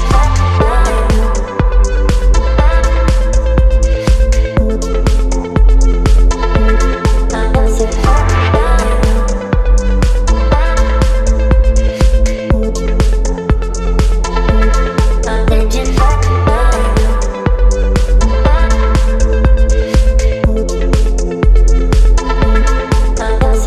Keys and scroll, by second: 22.0 ctrl+BackSpace.